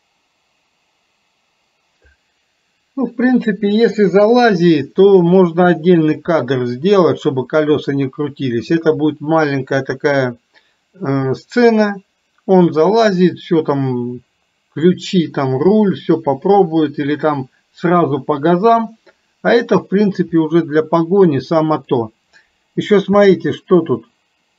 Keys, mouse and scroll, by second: 4.8 middle click, 20.5-22.0 middle drag.